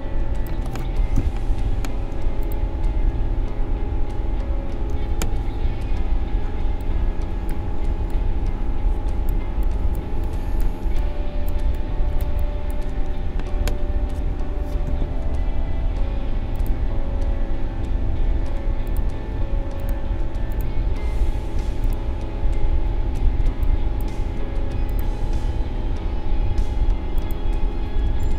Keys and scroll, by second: 5.1 ctrl+shift+a, 6.5 space, 14.8 a, 23.4 space, 28.0 space.